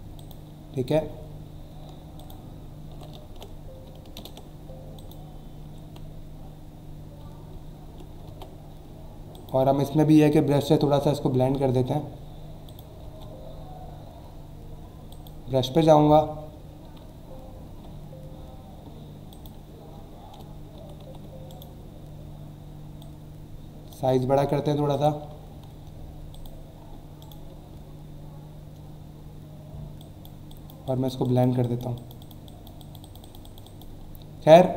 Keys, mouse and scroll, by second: 0.2 click, 2.2 alt+click, 3.2 ctrl+z, 4.2 ctrl+Return, 5.0 alt+click, 7.4-7.8 alt+scroll down 2, 8.3 v, 9.3 click, 10.6 b, 12.7 click, 13.0 b, 15.1 click, 19.3 click, 21.5 right click, 23.0 click, 24.9 click, 26.3 click, 27.2 right click, 30.0 click, 31.6 click, 31.9 click, 34.0 alt+scroll down 1, 34.5 alt+scroll up 1.